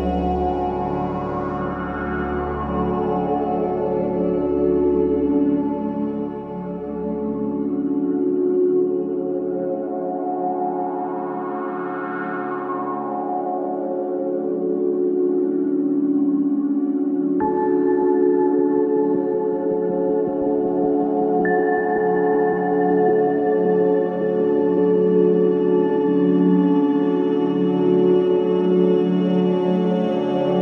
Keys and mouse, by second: 0.0 c, 0.7-17.6 drag, 19.3 click, 19.8-21.2 drag, 21.2 F3, 24.1 F3, 25.8 Escape, 26.8 F3, 28.0-30.4 drag.